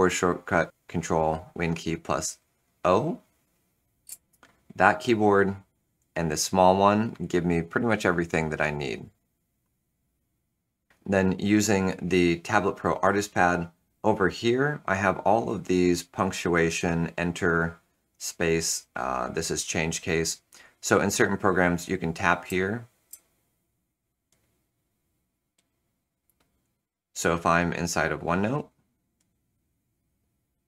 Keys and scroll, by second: 4.0 ctrl+super+o, 22.4 shift+F3, 23.0 shift+F3.